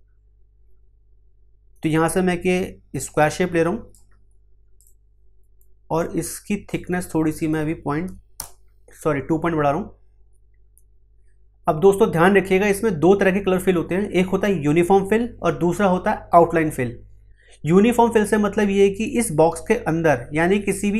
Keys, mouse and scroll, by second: 1.8-4.7 drag, 5.4 F2, 5.9-7.3 drag, 8.3 Return.